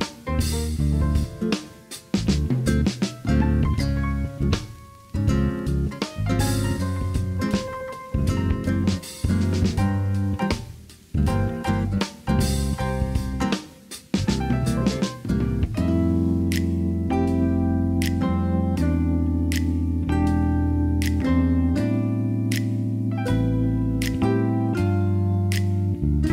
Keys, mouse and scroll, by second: 0.1 KP_1, 0.6 alt+z, 1.5 g, 2.9 alt+z, 3.5 Tab, 3.9-6.2 middle drag, 7.3-7.8 middle drag, 8.1 shift+middle drag, 8.4-8.7 middle drag, 9.1 click, 9.4 Tab, 9.8 middle click, 10.7 Tab, 11.0 middle click, 11.4 click, 11.6 Tab, 12.1 middle click, 13.7 click, 14.4 alt+shift+click, 14.9 click, 15.8 alt+shift+click, 16.8 KP_3, 17.4 alt+z, 17.7 shift+middle click, 18.4 shift+middle click, 19.4 e, 22.0 s, 23.2 click, 23.7 KP_1, 26.0 s.